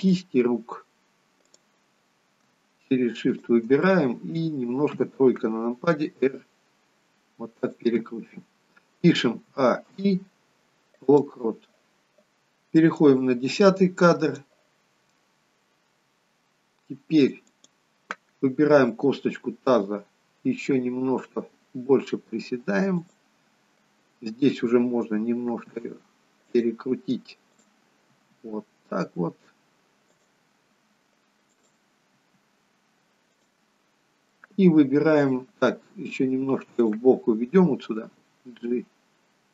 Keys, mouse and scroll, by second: 1.5 click, 3.3 shift+click, 3.8 middle click, 4.8 KP_3, 6.2 r, 9.6 a, 9.9 i, 13.0 click, 17.4 click, 19.4 g, 25.4 r, 27.5 click, 28.1 r, 31.4 click, 32.2 r, 34.4 middle click, 36.8 click, 38.1 g.